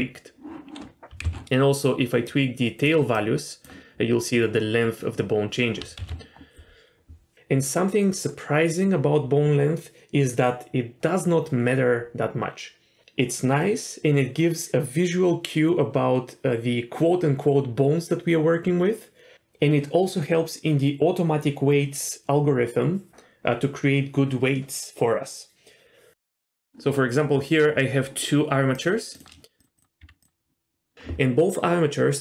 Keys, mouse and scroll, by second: 1.2 ctrl+z, 2.2 click, 3.1 click, 6.0 ctrl+z, 26.6 click, 26.6 middle click, 28.7 click, 29.1 click, 29.6 click, 29.7 click, 30.0 Tab, 30.2 click.